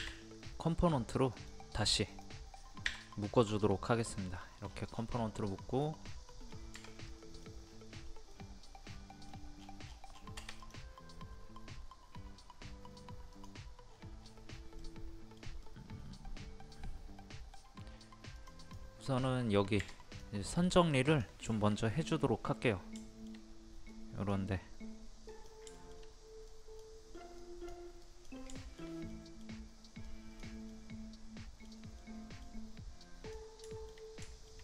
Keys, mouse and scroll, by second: 0.0 w, 1.3 click, 4.3 middle click, 4.7-5.0 scroll down 1, 5.5 click, 6.1 middle click, 7.6-8.3 scroll up 1, 8.3 middle click, 9.2 scroll down 1, 9.3 scroll up 1, 9.5-9.9 scroll down 1, 9.9 scroll up 1, 10.1-10.6 scroll down 1, 10.6 click, 13.8-14.5 scroll up 1, 14.8-17.9 middle drag, 18.3 click, 19.2 scroll up 1, 19.8 scroll up 1, 19.9 click, 21.9-22.9 middle drag, 23.9-24.9 drag, 25.7 shift+middle click, 26.5 click, 28.6 shift+middle click, 30.0 click, 30.7 middle click, 33.0 click, 33.7 shift+middle click.